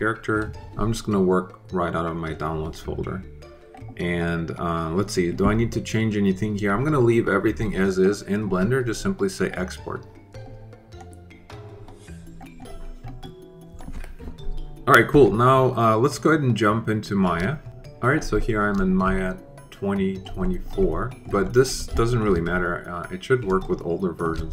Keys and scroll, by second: 0.0-0.1 typing.